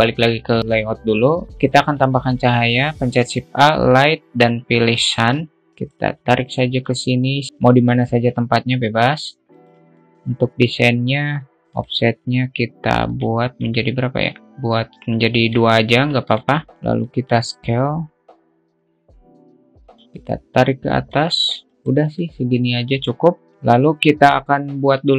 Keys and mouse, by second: 0.0-1.5 drag, 2.5 shift+a, 5.7 click, 7.0 alt+middle click, 8.5 shift+t, 10.1 shift+middle click, 12.2 click, 13.5 click, 14.3-16.0 alt+middle drag, 17.5-20.0 drag, 20.6 click, 21.7 click, 22.5 click, 23.5 click.